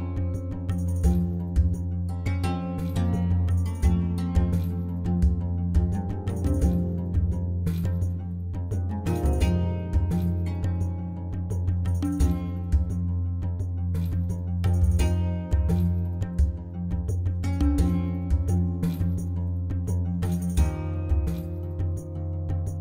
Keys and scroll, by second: 0.5 i, 2.6 alt+a, 5.5 Tab, 5.7 alt+a, 9.9 shift+s, 12.0 shift+a, 13.7 1, 13.8 Return, 14.4 Tab, 14.6 s, 15.7 Tab, 16.0 g, 16.2 z, 17.8 ., 18.5 Tab, 18.9 ctrl+r, 19.6 Return, 20.2-22.8 typing.